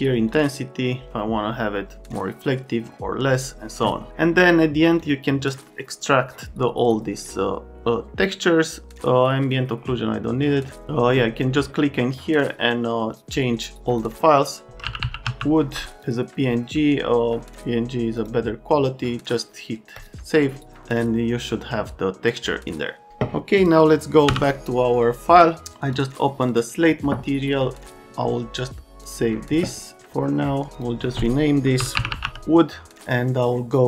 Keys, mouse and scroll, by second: 0.2 right click, 5.0 right click, 9.4 click, 13.9 click, 14.4-15.7 typing, 16.0 click, 18.1 click, 19.9 click, 23.6 click, 24.3 m, 25.6 click, 30.8 click, 31.5-32.7 typing.